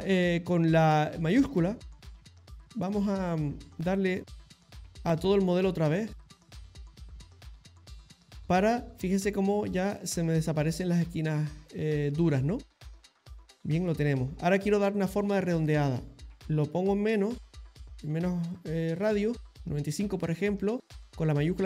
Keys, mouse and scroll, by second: 1.6 shift+click, 2.0 shift+click, 2.3 shift+click, 2.8 shift+click, 4.2 middle click, 5.1 shift+click, 5.9 middle click, 6.6 shift+click, 7.1 middle click, 7.7 shift+click, 8.8 middle click, 9.4 shift+click, 9.9 middle click, 10.7 middle click, 11.7 middle click, 12.4 shift+click, 12.9 middle click, 15.8 click, 18.5 click, 19.6 middle click, 21.2 shift+click, 21.4 shift+click.